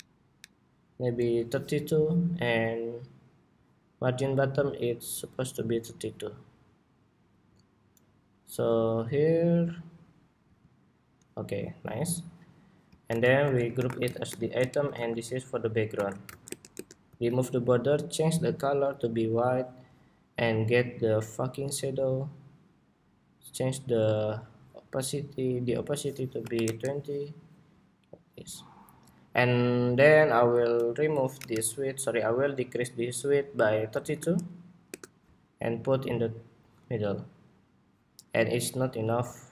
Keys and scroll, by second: 0.3 alt+Down, 12.7 super+g, 13.1 super+r, 14.6 super+g, 15.6 super+r.